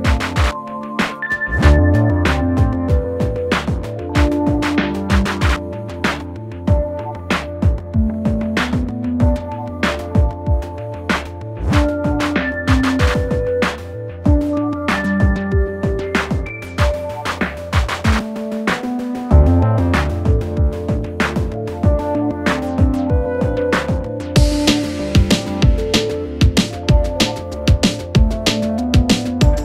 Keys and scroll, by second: 0.5 Escape, 0.8 F2, 4.7 space, 7.9 F2, 15.9 ctrl+q, 26.5 F3, 26.8 space, 27.3 F2.